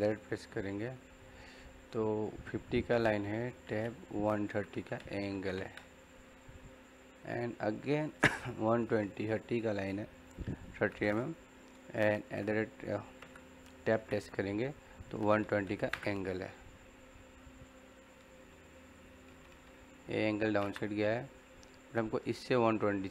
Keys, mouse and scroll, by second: 3.7 Tab, 11.8 Tab, 12.1 shift+2, 13.8 Tab, 18.8 click, 20.4 e, 20.5 space, 21.1 middle click, 21.6 scroll up 1, 22.7 middle click.